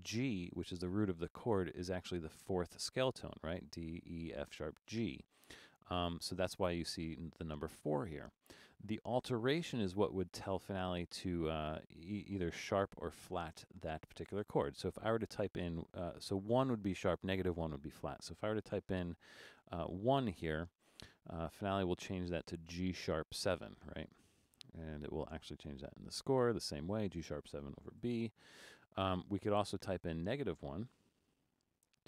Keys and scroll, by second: 19.4 1, 28.0 Return, 31.3-32.0 typing.